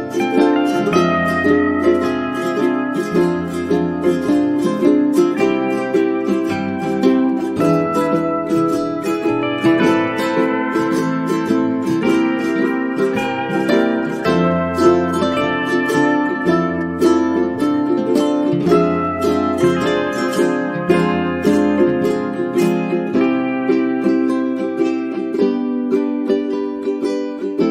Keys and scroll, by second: 11.5 Caps_Lock.